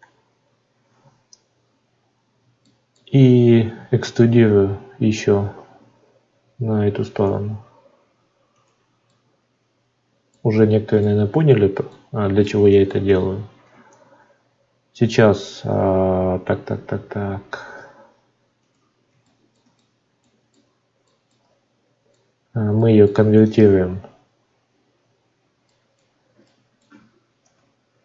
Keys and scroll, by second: 13.7 Tab.